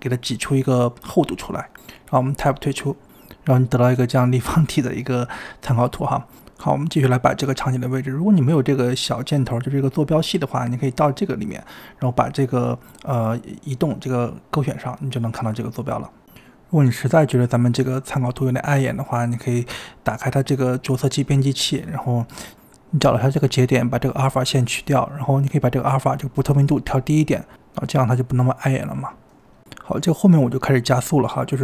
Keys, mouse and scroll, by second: 0.3 e, 2.9 Tab, 3.3 middle click, 5.5 KP_7, 5.9-6.3 scroll up 2, 6.3 click, 6.6 g, 8.0-8.4 scroll down 2, 8.4 click, 8.7 click, 10.1 click, 13.3-16.2 drag, 16.2 click, 16.6 drag, 17.1 click, 17.7 click, 18.9 click, 21.4 click, 21.9-22.3 scroll down 1, 22.3-22.8 drag, 22.8-23.8 shift+middle drag, 23.8 click, 26.2-28.7 drag, 28.7 middle click, 28.8 KP_1, 28.8-29.7 scroll up 6, 28.8 click, 28.9 s, 28.9 g, 29.0 s, 29.7 click, 30.1 g, 30.3 s, 30.5 g, 30.7-31.3 scroll down 5, 31.3 scroll up 3.